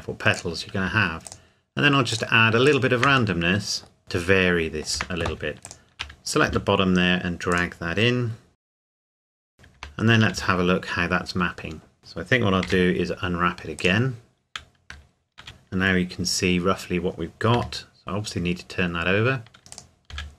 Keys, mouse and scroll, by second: 0.4 click, 1.3 shift+click, 3.4 middle click, 5.0 Tab, 5.6 alt+click, 6.4 s, 7.5 click, 8.5 g, 8.6 click, 8.9 g, 9.0 click, 9.2 g, 9.4 Tab, 10.4 a, 12.0 Tab, 12.6 u, 13.8 click, 15.4 a, 16.8 a, 17.5 r, 19.7 click, 20.1 s.